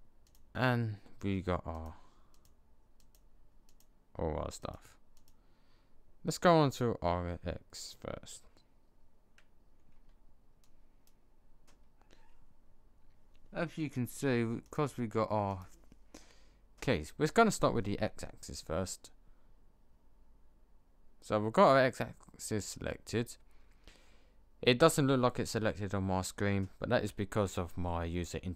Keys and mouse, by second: 0.0 click, 6.8 click, 9.8 b, 14.5-17.1 drag.